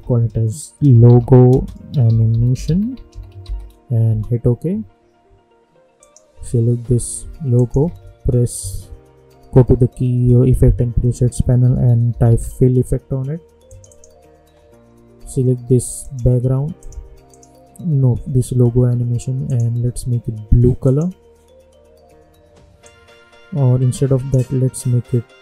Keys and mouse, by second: 0.3-3.9 typing, 4.0 Return, 6.0 click, 7.8 ctrl+a, 11.4-12.7 typing, 13.6 click, 16.8 click, 19.4-25.4 drag.